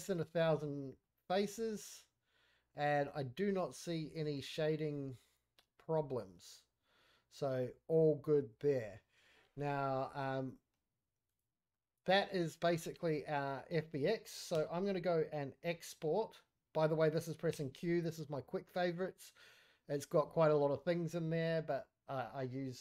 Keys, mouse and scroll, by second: 0.0-0.6 middle drag, 0.7-1.0 scroll down 1, 1.0-1.3 middle drag, 1.5 scroll up 2, 1.6-3.5 middle drag, 3.6-3.9 scroll down 4, 3.9 middle drag, 4.3-4.7 scroll up 2, 4.9-6.7 middle drag, 8.2-8.7 middle drag, 9.3 scroll down 1, 9.5-10.0 middle drag, 11.2 click, 11.7-12.3 middle drag, 12.6 middle click, 14.5 q, 17.5 q.